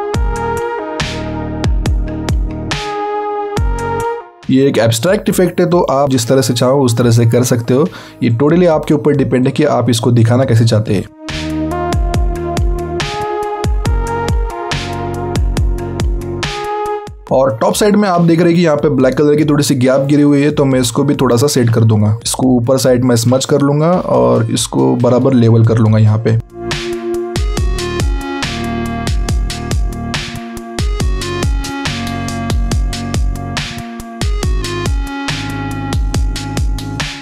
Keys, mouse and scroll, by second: 4.2 click, 13.3 alt+right click, 14.3 click, 16.2 alt+scroll down 1, 16.5-16.9 alt+scroll up 2, 17.9 alt+scroll up 1, 18.8-19.5 scroll up 1, 20.0 alt+right click, 22.5 click, 32.9 alt+scroll down 1, 33.1-33.5 alt+scroll up 2, 33.5 click, 36.4 alt+scroll down 1, 36.5 alt+scroll up 1, 36.6 click.